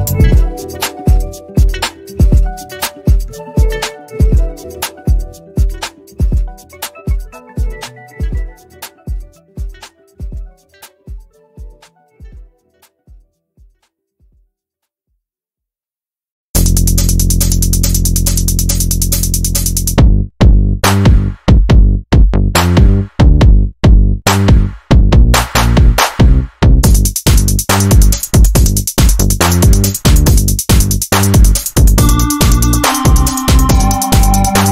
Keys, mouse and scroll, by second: 1.0 ctrl+c, 1.2 click, 2.1 ctrl+v, 2.4 Return, 3.6 click, 3.8 ctrl+z, 4.2 shift+click, 5.8 shift+Left, 7.2 shift+click, 8.0 ctrl+alt+u, 9.9 ctrl+shift+[, 11.4 click, 12.2 click, 14.4 shift+e, 15.7 shift+m, 16.4 ctrl+z, 17.2 shift+c, 18.2 click, 19.3 ctrl+z, 19.7 shift+click, 20.5 ctrl+alt+u, 21.5 ctrl+scroll down 1, 21.9 z, 22.6 ctrl+scroll up 1, 22.8 click, 24.1 Down, 27.0 shift+click, 29.3 ctrl+g, 30.7 ctrl+shift+g, 31.6 click, 32.0 ctrl+scroll up 1, 32.6 click, 33.4 Up, 34.1 ctrl+scroll down 1.